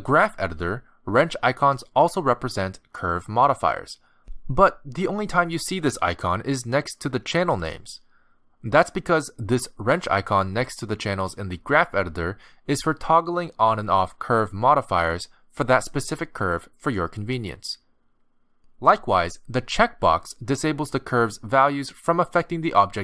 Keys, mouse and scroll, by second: 13.8 click, 16.2 click, 17.9 click, 19.9 click, 21.3 click.